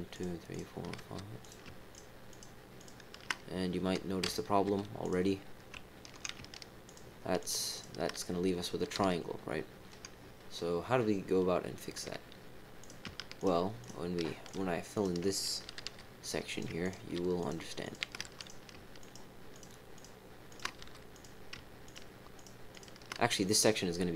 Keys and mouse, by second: 0.1 shift+click, 0.5 shift+click, 1.0 f, 1.4 click, 1.9 shift+click, 2.3 shift+click, 2.7 shift+click, 5.0 click, 7.4 shift+click, 7.7 shift+click, 8.9 f, 12.8 click, 13.3 shift+click, 13.8 shift+click, 14.4 shift+click, 14.9 shift+click, 15.7 f, 16.4 click, 16.8 shift+click, 17.4 shift+click, 17.8 shift+click, 18.1 f, 18.3 click, 19.0 shift+click, 19.5 shift+click, 19.9 shift+click, 20.4 shift+click, 21.1 click, 21.8 shift+click, 22.7 shift+click.